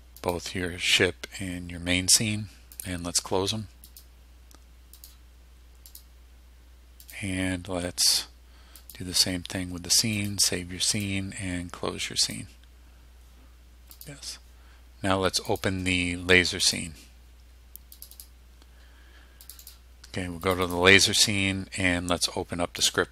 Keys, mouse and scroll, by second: 0.3 click, 2.9 click, 4.0 click, 5.1 click, 6.0 click, 7.1 click, 8.9 click, 10.3 click, 11.0 click, 12.3 click, 14.1 click, 15.6 click, 16.7 click, 18.0 click, 19.5 click, 20.5 click, 22.9 click.